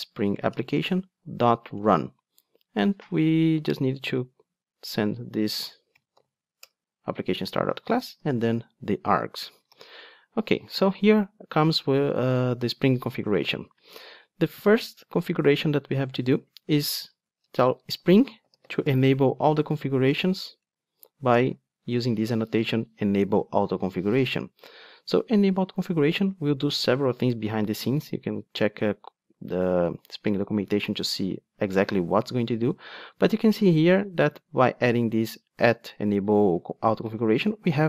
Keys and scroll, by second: 0.6 Return, 9.7 alt+super+l, 21.4 Return.